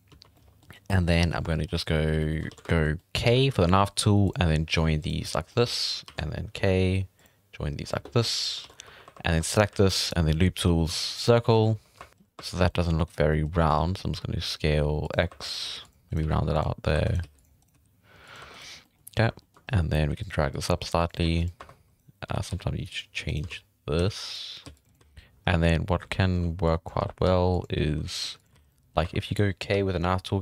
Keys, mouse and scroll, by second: 0.0 n, 0.3 middle click, 0.6 scroll up 2, 0.9 middle click, 1.3 scroll down 4, 1.4 shift+middle click, 1.7-2.1 scroll up 3, 2.1 scroll down 1, 2.2 middle click, 2.5 alt+a, 2.6 shift+middle click, 3.2 k, 5.5 middle click, 6.0 alt+a, 6.5 k, 8.6 alt+a, 8.8 3, 9.0 1, 9.3 3, 9.4 right click, 9.7 w, 11.5 alt+a, 11.6-11.9 scroll up 3, 11.9 1, 12.3 1, 12.5 3, 12.6-13.0 middle drag, 13.0 right click, 13.2 scroll down 1, 13.3-13.6 middle drag, 13.6 s, 15.3-18.4 typing, 15.4 right click, 16.1 right click, 17.0 right click, 17.6 right click, 18.5 right click, 18.7 scroll down 1, 18.8 middle click, 19.4 shift+middle drag, 19.6-19.9 scroll up 4, 19.9-29.7 typing, 21.9 right click, 23.2 right click, 25.4-26.0 scroll up 1, 26.6 drag, 28.5 alt+a, 28.6 scroll down 1, 28.7 middle drag, 28.9 scroll up 1, 29.2 middle click.